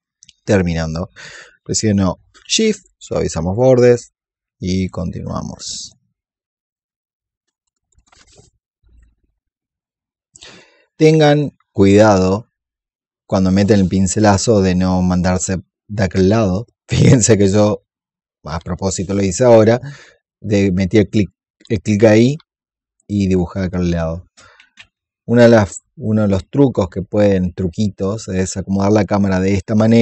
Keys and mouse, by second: 1.1 click, 2.0 alt+click, 2.6 shift+click, 3.4 shift+click, 7.7 click, 8.7 click, 8.9 alt+click, 10.7 ctrl+z, 12.1-14.3 drag, 15.4 click, 22.2 click, 24.5 ctrl+z, 25.0-28.7 alt+drag, 28.9-30.0 alt+drag.